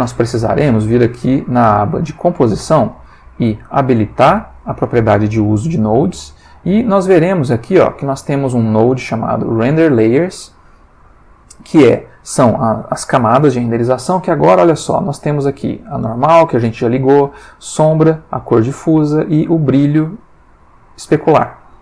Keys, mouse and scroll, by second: 2.1 click, 4.3 click, 5.8 click, 6.3 click, 7.1 click, 9.6 middle click, 10.6 ctrl+middle click, 11.6-13.3 ctrl+drag, 20.5-21.3 drag.